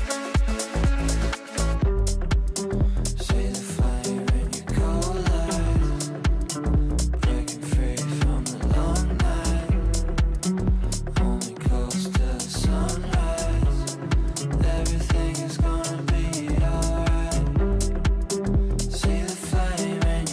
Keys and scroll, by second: 8.3 r.